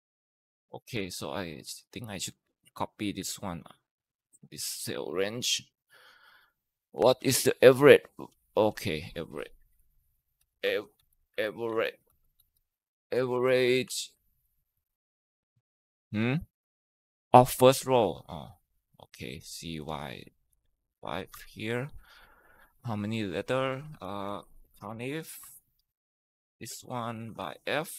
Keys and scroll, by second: 0.4 ctrl+Return, 2.3 ctrl+c, 3.0 Escape, 4.5 ctrl+Left, 4.7 ctrl+Left, 9.6-12.4 typing, 13.0 Down, 13.2 Tab, 13.7-14.9 typing, 19.7 BackSpace, 20.3 BackSpace, 21.1 Tab, 23.5-27.9 typing, 26.2 ctrl+v, 27.2 Down.